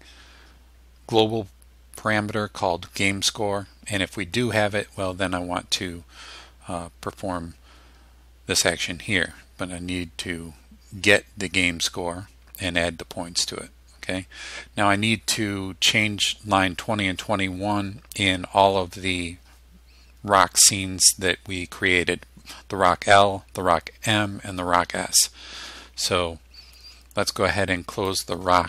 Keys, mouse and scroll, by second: 28.1 click.